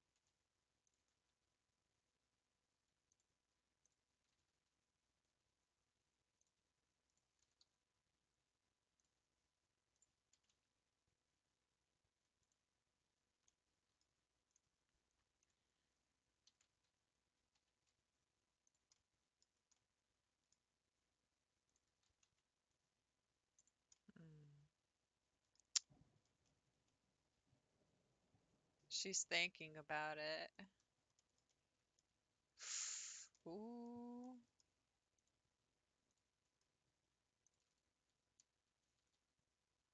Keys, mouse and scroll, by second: 0.8 alt+Left, 0.8 click, 3.1 Left, 3.1 click, 3.8 Left, 3.8 click, 4.3 g, 7.1 click, 7.6 g, 9.9 click, 10.4 g, 10.5 g, 13.5 middle click, 14.5 click, 15.4 click, 16.6 ctrl+s, 17.7 s, 19.1 middle click, 19.5-19.8 scroll down 2, 19.8-21.7 middle drag, 21.7 click, 22.1 s, 24.0-29.9 middle drag, 29.9 scroll up 1, 30.5 click, 31.2-32.3 shift+middle drag, 32.3 ctrl+r, 33.4-34.8 middle drag, 34.8 scroll up 1, 35.2 click, 36.1 click, 36.6 scroll down 1, 37.4 click, 38.7 g.